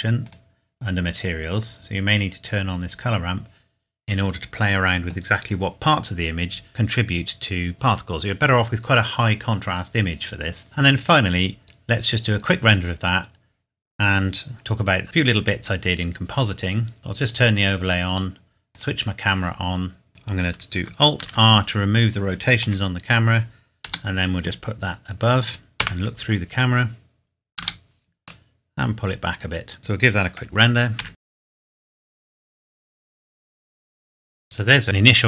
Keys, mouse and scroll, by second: 0.2 click, 1.0-1.7 scroll down 1, 6.7 scroll down 1, 11.4-13.4 scroll down 1, 14.5 click, 15.0 middle click, 15.8 scroll down 1, 17.0 click, 21.2 alt+r, 22.7 KP_7, 23.9 g, 25.2 click, 25.8 KP_0, 27.6 g, 27.8 middle click, 29.8 ctrl+s, 31.0 F12, 33.7 scroll down 1, 34.2 scroll up 1.